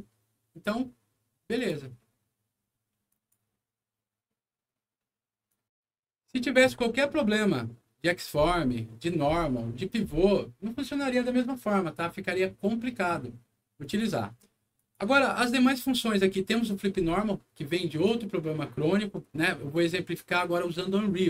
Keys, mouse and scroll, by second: 1.5 click, 3.0 click, 5.4 click, 5.8 Return, 13.8 click, 14.7 click.